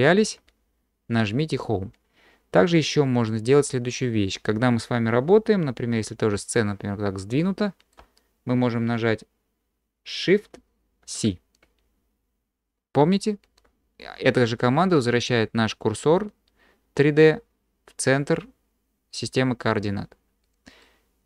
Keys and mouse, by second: 6.4-7.9 shift+drag, 11.0 shift+c, 20.8-21.2 drag.